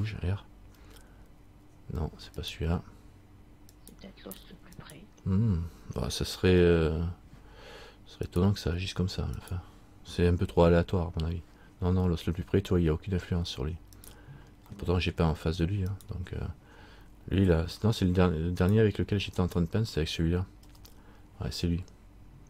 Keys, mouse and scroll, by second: 0.9 r, 3.9 right click, 6.6 right click, 6.6 r, 9.6 right click, 10.7 r, 15.3 middle click, 16.1 right click, 18.1 r, 19.6 right click, 20.8 r.